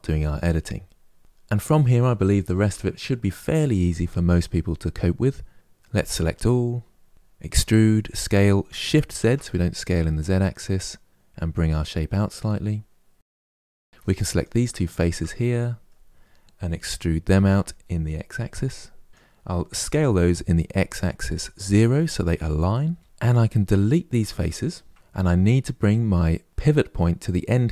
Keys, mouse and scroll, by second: 5.7 a, 7.2 e, 13.3 shift+middle click, 14.1 click, 14.6 shift+click, 15.1-17.0 middle drag, 17.0 e, 19.6 s, 24.1 Delete, 24.9-26.5 middle drag.